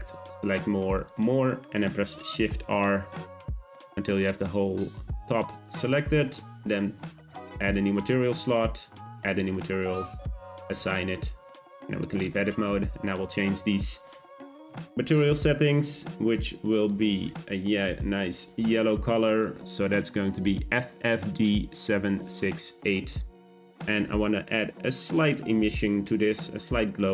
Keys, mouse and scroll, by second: 2.3 shift+r, 2.7 shift+r, 3.0 shift+r, 3.5 shift+r, 7.5-11.5 drag, 11.5 Tab, 18.2 click, 26.6 click.